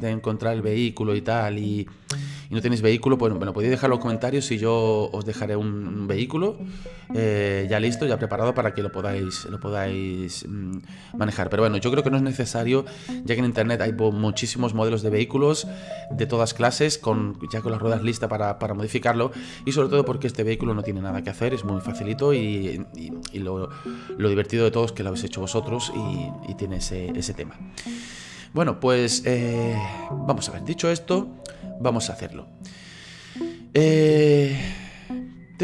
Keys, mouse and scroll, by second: 22.4-25.4 middle drag, 32.1-35.6 middle drag.